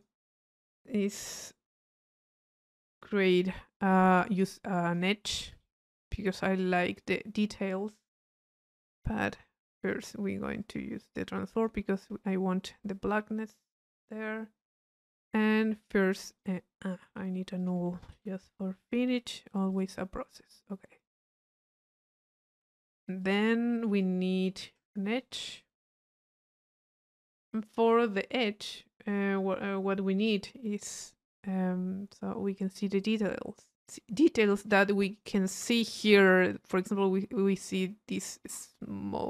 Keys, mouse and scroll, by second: 4.4 middle click, 4.8 click, 5.2 right click, 5.9-7.4 drag, 7.4-8.7 middle drag, 8.7 click, 9.6 middle click, 9.9 click, 10.6-12.0 drag, 12.9-14.2 drag, 15.6-16.8 drag, 17.1 right click, 17.6 click, 18.1 click, 18.4 u, 19.7 click, 20.5 click, 21.6 click, 23.2 click, 24.0-25.1 drag, 26.4-27.8 drag, 31.6-33.1 middle drag, 34.1 middle click, 34.9 click.